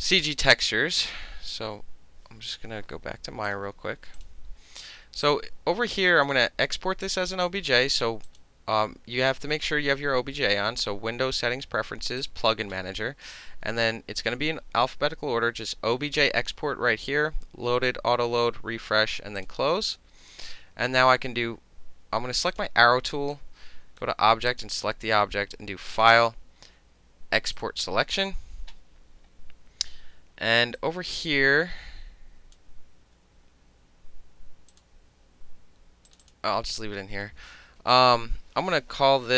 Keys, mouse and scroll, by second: 3.5 click, 4.2 click, 5.3 click, 8.3 click, 12.2 click, 13.7 middle click, 14.1 middle click, 19.4 click, 19.5-22.5 middle drag, 22.5 click, 22.6 middle click, 23.3-24.0 right drag, 24.5 click, 26.0 click, 27.6 click, 30.8-32.6 drag, 34.7 click, 36.1 click, 36.2 middle click, 36.2 click, 36.3-37.9 middle drag, 37.9 click, 38.0 middle click.